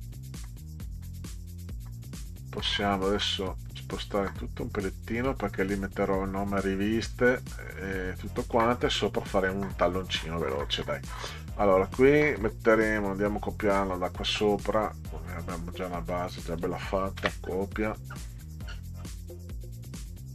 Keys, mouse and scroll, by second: 1.0 middle click, 1.8 shift+click, 2.2 shift+click, 2.5 shift+click, 3.7-4.7 drag, 5.8 click, 7.8 click, 8.6 middle click, 10.3 middle click, 13.0-15.1 scroll up 14, 15.8 click, 17.2 ctrl+c, 17.5-19.0 scroll down 12, 19.8 click.